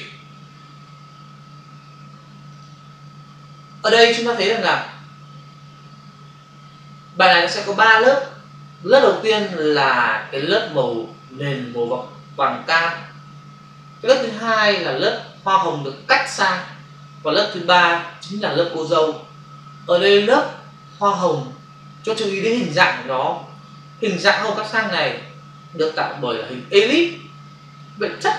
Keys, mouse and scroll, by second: 2.4 click.